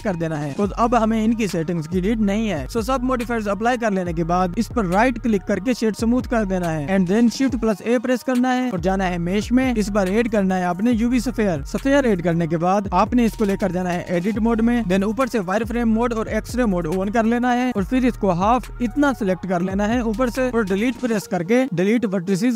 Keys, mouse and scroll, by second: 2.1-4.5 right drag, 4.5 click, 7.7 shift+a, 12.2-12.6 scroll down 1, 13.1 click, 15.3-19.5 drag, 19.8-20.8 drag, 22.4 Delete.